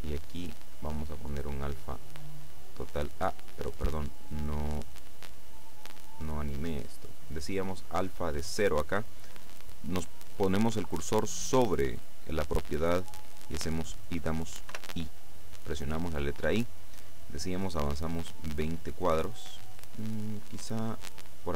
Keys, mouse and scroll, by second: 1.0-4.1 drag, 5.3 click, 6.0-7.5 drag, 10.9 click, 14.8 i, 18.4-21.5 drag.